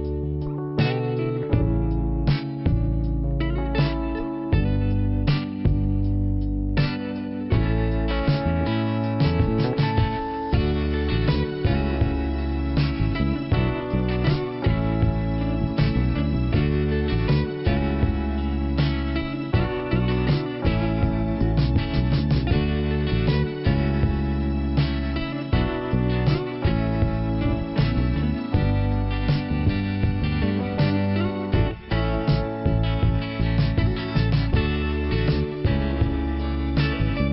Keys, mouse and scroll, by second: 0.8 scroll up 2, 3.6 scroll down 1, 6.3 scroll up 2, 9.1 scroll down 2, 17.3 click, 18.1-18.6 scroll down 1, 21.5 click, 22.4 click, 25.1 click, 25.9 click, 26.7-27.1 scroll up 3, 31.5 middle click, 33.6 click, 34.7-35.2 scroll down 1, 36.3-37.1 scroll down 1.